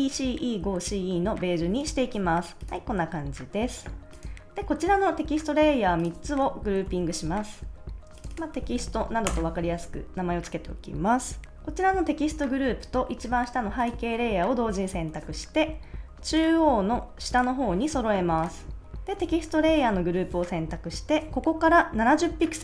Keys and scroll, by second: 6.8 super+g, 8.3-9.4 typing.